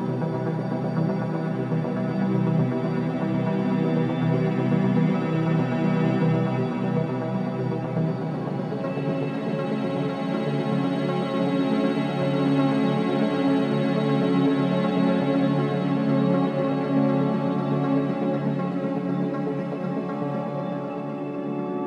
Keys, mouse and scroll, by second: 0.2-1.2 typing, 3.0-3.8 scroll down 1, 3.8-5.4 drag, 5.2-6.6 typing, 7.0 Return, 7.5-7.8 scroll up 1, 8.8 click, 10.1 scroll down 1, 11.0 scroll up 1, 12.3 click, 12.9 scroll up 1, 13.5 click, 13.8 scroll down 1, 14.5-15.0 scroll up 1, 15.4 click, 18.1-18.5 scroll down 1, 18.9 scroll up 1, 19.6 click, 20.5 scroll down 1.